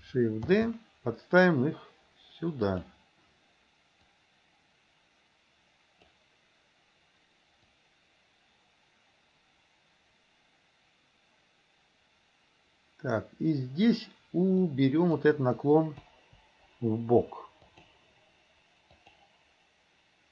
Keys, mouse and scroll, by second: 0.6 shift+d, 4.1-7.1 drag, 8.5-14.0 drag, 14.8-15.2 drag, 16.1 Delete, 17.8 click, 19.1 click.